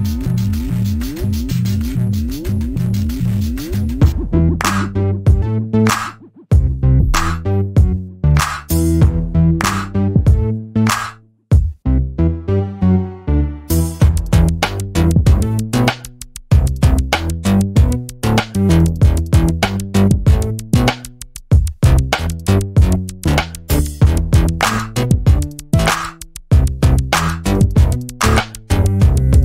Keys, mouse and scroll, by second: 0.7-1.3 scroll down 1, 1.3 alt+click, 2.9-4.0 scroll up 1, 4.3 alt+click, 8.2 right click, 8.7 click, 12.6 double click, 13.2 scroll down 1, 13.5 alt+click, 15.2-15.8 scroll down 1, 15.8 alt+click, 22.6 scroll up 1, 23.9 n, 24.0 b, 24.3 scroll up 1, 24.7 alt+click, 25.1 alt+middle click, 25.4 alt+click, 29.0 double click.